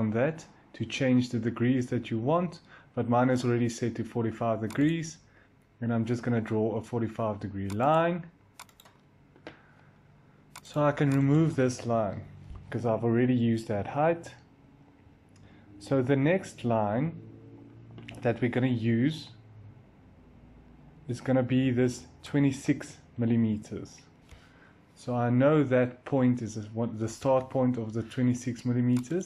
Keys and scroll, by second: 12.1 Delete, 27.0 l.